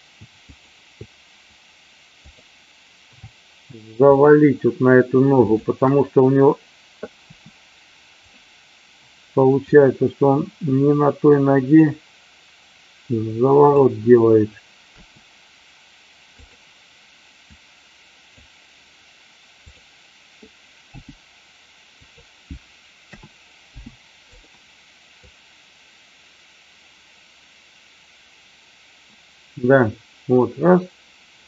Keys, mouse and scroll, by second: 0.4-0.9 shift+drag, 4.1-4.5 shift+drag, 5.4 shift+click, 7.2 r, 9.6-13.7 drag, 15.0 r, 17.5 click, 20.8 g, 22.0 click, 23.0 a, 23.6 i, 25.2-31.4 drag.